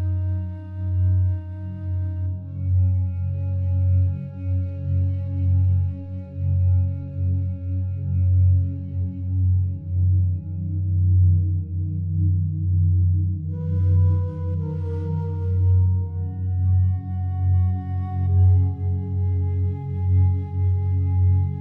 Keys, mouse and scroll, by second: 10.1 a, 10.3 a, 11.0-20.9 alt+drag.